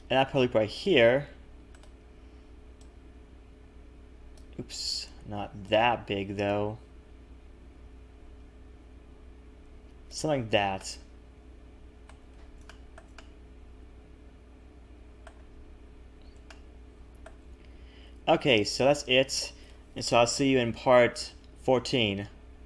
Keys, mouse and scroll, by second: 0.2 ctrl+r, 2.8 click, 5.6 click, 10.8 middle click, 12.2 a, 12.3 a, 12.6 shift+middle click, 13.1 middle click, 16.4 shift+middle click, 17.5-18.9 scroll up 1, 19.3 ctrl+s.